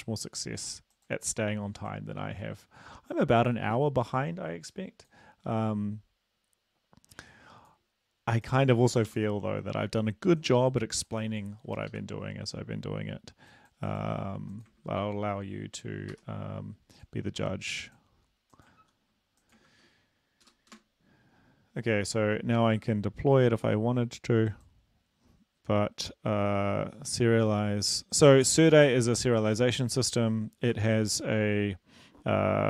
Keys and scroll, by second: 9.1 ctrl+l, 11.9 super+Left, 12.1 super+Left, 14.9 ctrl+v, 16.1 Escape, 18.8 ctrl+v, 19.6 ctrl+v, 20.5 Delete, 20.7 Return, 20.7 \, 30.7 ctrl+c.